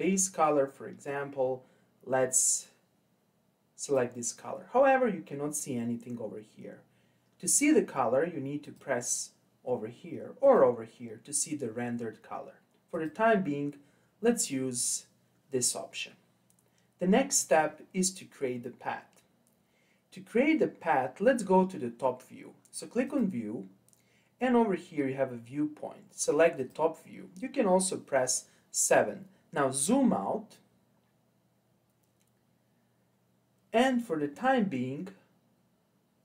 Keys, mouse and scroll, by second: 8.6 click, 10.5 click, 12.9 click, 23.0-26.1 drag, 30.0-31.7 scroll down 4, 31.7-34.7 scroll down 1.